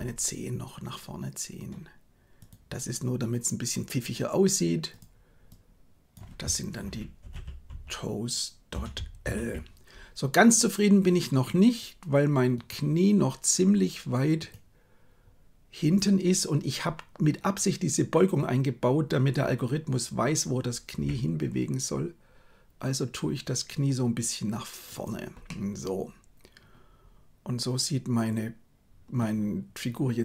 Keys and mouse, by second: 5.0-12.5 drag, 14.3 right click, 21.0 g, 25.4-29.1 middle drag.